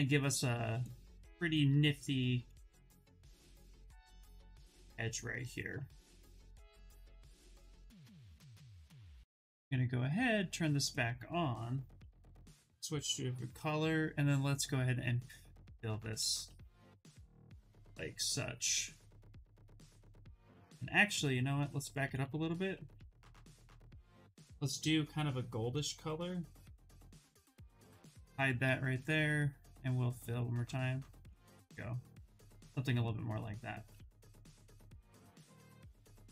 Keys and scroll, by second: 17.8 ctrl+h, 19.7 ctrl+h, 21.7 ctrl+z, 21.9 ctrl+z, 22.3 ctrl+z, 22.5 ctrl+z, 22.8 ctrl+z, 23.0 ctrl+z, 23.5 ctrl+z, 28.0 ctrl+h.